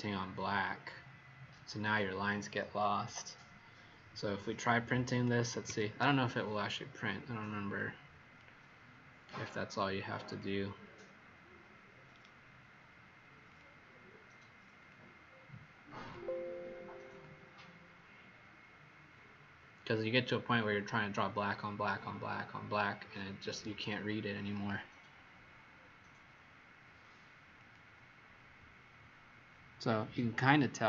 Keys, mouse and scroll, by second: 0.7-1.1 scroll up 2, 5.6 ctrl+p, 7.7 click, 12.1 right click, 13.4 click.